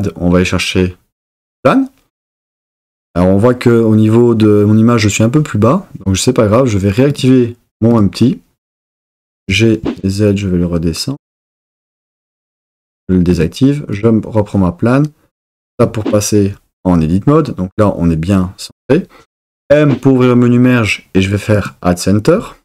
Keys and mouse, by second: 7.1 click, 9.4 g, 9.8 z, 11.5 click, 13.4 click, 15.7 Tab, 19.6 m.